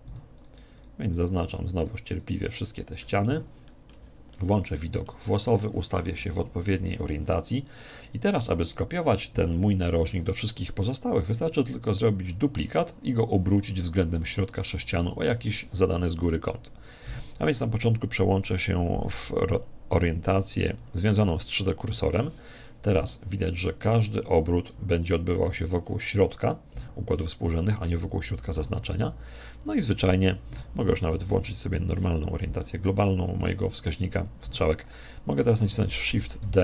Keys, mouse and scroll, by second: 2.9-6.0 middle drag, 4.0 z, 6.1 KP_1, 18.9 click, 36.5 shift+d.